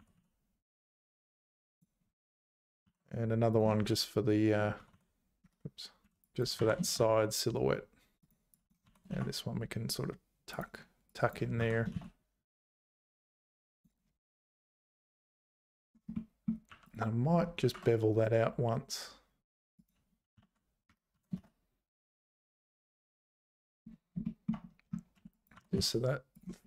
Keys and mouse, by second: 0.0 g, 2.8 ctrl+r, 6.0 1, 6.2 click, 6.6 g, 8.6 click, 8.8 g, 11.2 click, 11.6 g, 16.3 click, 16.7 2, 16.9 click, 17.6 ctrl+b, 20.5 shift+g, 21.2 g, 22.8 `, 24.3 shift+click, 25.2 1, 25.5 g.